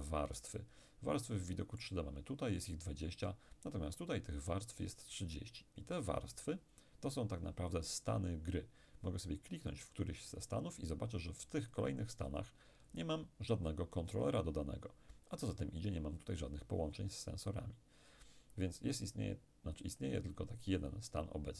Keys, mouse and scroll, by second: 1.2-2.8 middle drag, 9.7 click, 11.7 click, 20.9 click.